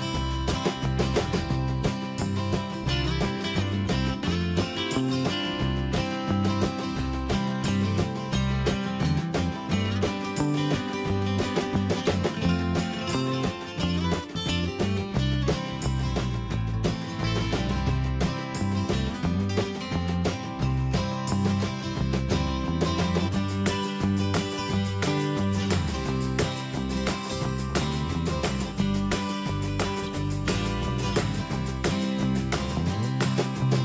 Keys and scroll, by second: 22.6 ctrl+Return.